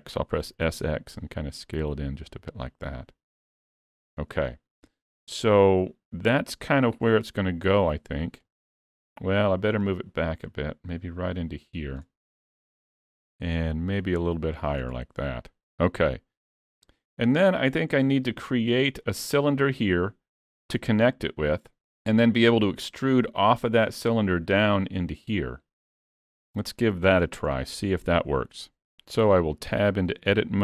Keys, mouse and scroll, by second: 0.5 s, 4.5-4.9 scroll down 2, 4.9 middle click, 6.0 click, 7.2 middle click, 8.5 middle click, 9.1-9.9 scroll up 1, 9.9 click, 12.3-12.6 scroll down 1, 12.6 middle click, 13.8 click, 14.6 middle click, 15.8 click, 16.4 middle click, 17.9 scroll up 3, 18.1 shift+middle click, 21.9 shift+middle click, 26.7 middle click, 29.3 Tab, 29.8 shift+middle click, 30.3-30.6 scroll up 5.